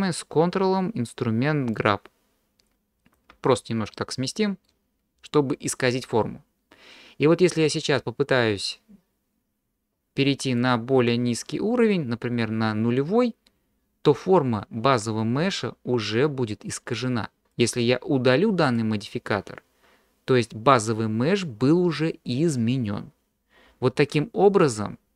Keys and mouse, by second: 1.8-3.1 ctrl+drag, 3.7 click, 3.7 middle click, 3.7 right click, 3.9 middle click, 10.7-17.5 drag, 18.7 click.